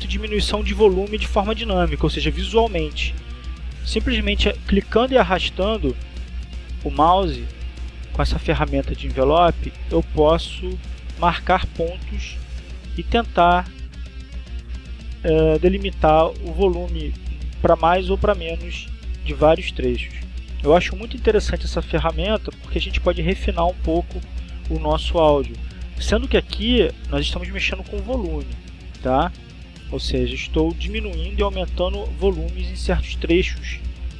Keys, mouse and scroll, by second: 3.2-4.4 drag, 4.5-6.3 drag, 7.4-12.3 drag, 12.4 click, 14.2-16.2 drag, 16.4 click, 22.6 click, 23.4 click, 25.8-28.7 drag, 29.8-33.2 drag.